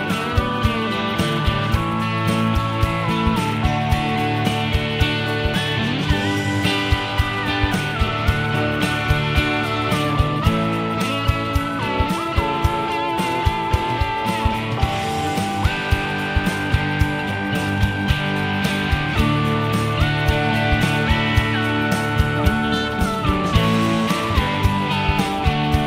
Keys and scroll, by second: 24.1-24.5 typing.